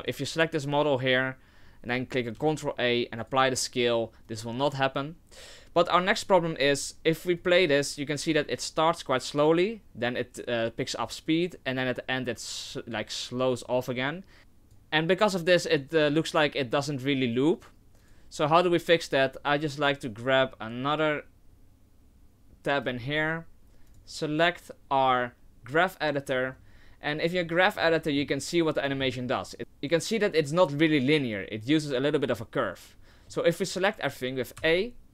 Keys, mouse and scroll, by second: 0.0 right click, 2.3 ctrl+a, 4.3 click, 7.4 click, 12.6 click, 13.5 click, 15.7 click, 18.4 click, 20.4 click, 25.4 click, 26.8 scroll, 27.4 middle click, 28.0 scroll, 28.7 middle click, 29.0 scroll, 33.0 scroll, 34.6 a.